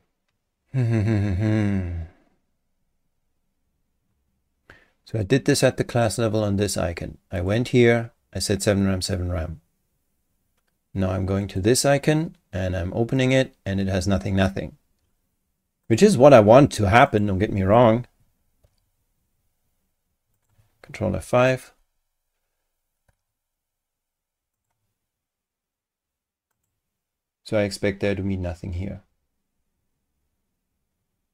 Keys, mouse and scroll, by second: 5.1 click, 7.4 click, 11.4 click, 11.7-12.9 scroll down 1, 13.1 click, 15.8 click, 17.1 click, 20.3 click, 21.1 ctrl+F5, 24.5 click, 26.5 click.